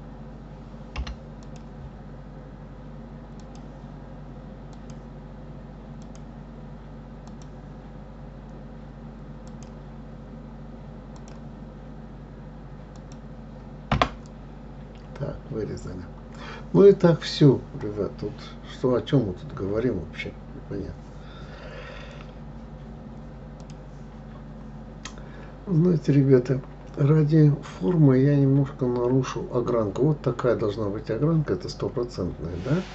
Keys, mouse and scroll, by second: 1.3 k, 24.1 scroll up 2, 25.5-27.3 scroll up 4, 27.3-28.1 scroll down 2, 30.2-31.6 scroll down 5, 31.6-32.9 scroll up 7.